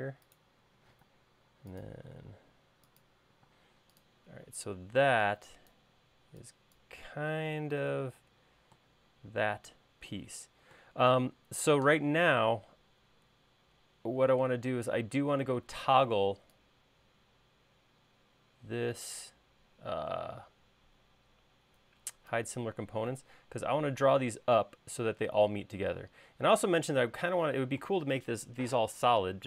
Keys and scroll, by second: 1.2 r, 3.7 space.